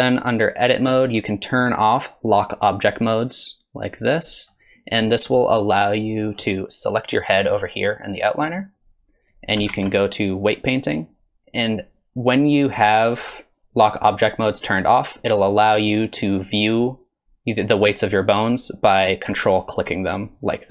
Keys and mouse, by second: 0.7-4.0 drag, 8.7 click, 9.7 ctrl+Tab, 13.2-14.8 drag, 20.3 shift+click.